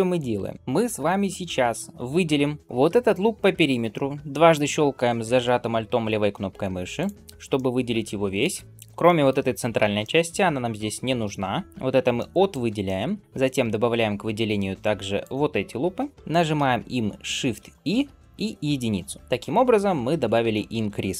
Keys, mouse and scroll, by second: 6.8 alt+click, 7.4-8.4 middle drag, 8.5 shift+middle click, 8.6 alt+z, 8.9 middle click, 9.6 b, 11.6 b, 12.0 middle click, 12.7 shift+middle click, 15.0 alt+shift+click, 16.0 alt+shift+click, 16.1 middle click, 17.2 shift+e, 20.4 shift+middle click.